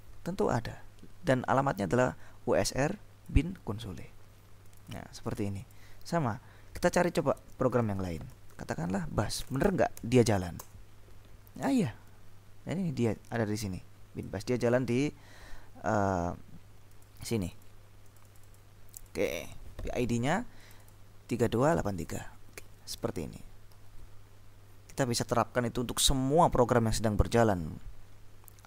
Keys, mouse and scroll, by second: 1.7-3.8 scroll up 2, 4.8-6.4 scroll up 2, 7.1-7.8 scroll up 2, 7.9 Up, 8.6 ctrl+w, 9.3-10.4 typing, 10.7 Return, 12.8-14.9 drag, 17.0-18.2 drag, 18.4-19.7 drag, 20.7 click, 22.0 click, 23.8 ctrl+l.